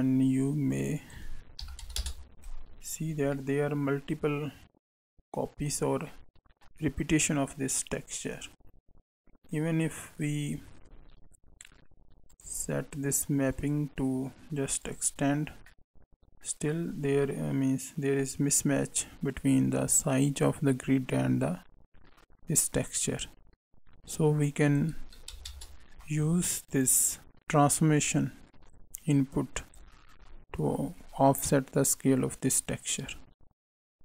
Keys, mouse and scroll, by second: 0.6 click, 3.0 scroll down 2, 3.3 middle click, 10.4-12.2 scroll down 6, 12.2 click, 12.5-13.5 scroll down 2, 13.5 click, 15.6 middle click, 16.9 scroll up 1, 17.2 middle click, 24.6 click, 26.7 click, 27.7 click, 32.5 click.